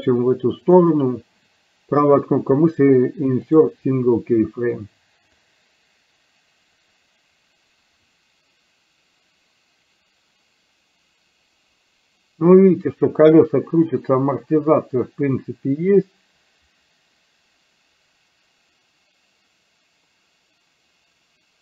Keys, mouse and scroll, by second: 0.9-3.7 right drag, 5.6-21.6 drag.